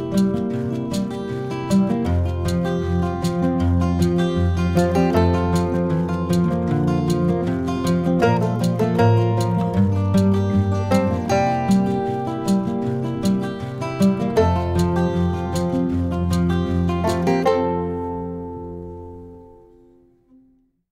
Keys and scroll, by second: 1.7 ctrl+0, 2.2 ctrl+-, 4.3 ctrl+KP_Add, 7.4 ctrl+-, 15.4 ctrl+-, 16.9 ctrl+KP_Add, 17.6 ctrl++, 18.9 ctrl+-, 19.6 ctrl++, 20.1 ctrl++.